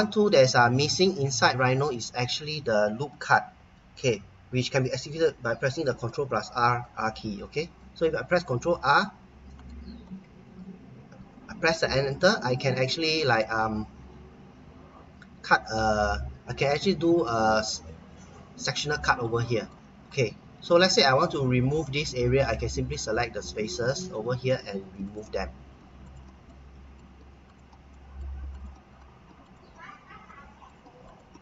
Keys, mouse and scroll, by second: 0.3-0.8 scroll up 1, 0.8-1.3 scroll down 1, 1.3 middle click, 6.0 ctrl+r, 8.5 click, 9.6 right click, 11.8 Return, 12.5 middle click, 19.0 middle click, 22.9 click, 25.0 click, 26.0 click, 26.5 middle click, 27.5 click, 27.9 middle click, 28.5 click, 28.8 scroll down 1, 29.4 click, 29.9-30.2 scroll down 1, 30.2 middle click, 31.1 click.